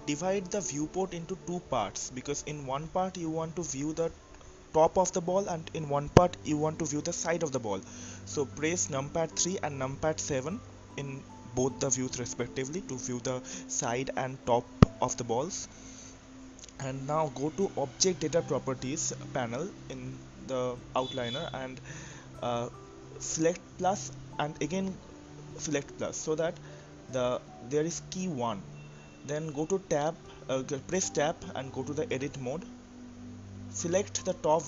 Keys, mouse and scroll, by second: 0.8-4.2 drag, 4.9-5.6 scroll up 1, 5.6-7.4 scroll up 1, 7.4 KP_3, 9.2 KP_7, 10.4-12.3 scroll up 3, 12.3-13.7 shift+middle drag, 12.9-13.7 scroll up 1, 13.7 click, 18.9-24.9 drag, 24.9 Tab, 27.5-28.7 scroll down 4, 28.7-30.1 scroll down 2, 33.0 click, 34.4-34.6 drag.